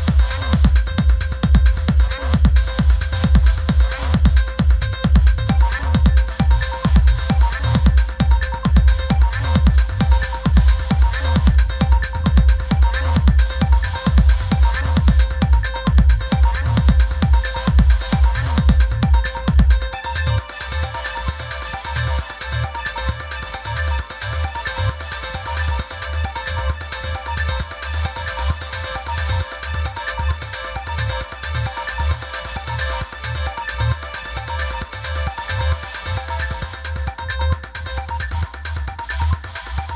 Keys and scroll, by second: 8.9 super+-, 9.5 i, 14.0 super+=, 26.1 super+-, 26.8 i, 33.7 super+=.